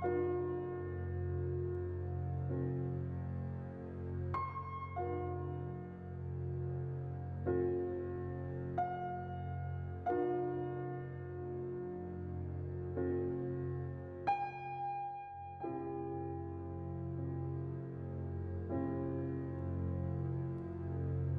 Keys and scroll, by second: 0.2 z, 7.3-8.1 typing, 11.4 a, 13.1 a.